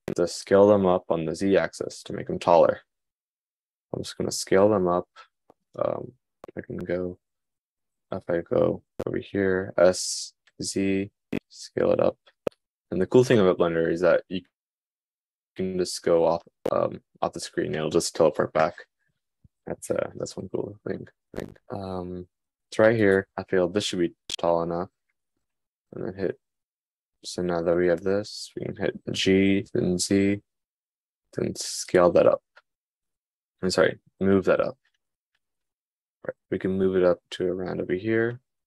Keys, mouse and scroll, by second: 1.9 s, 9.9 s, 28.9 g.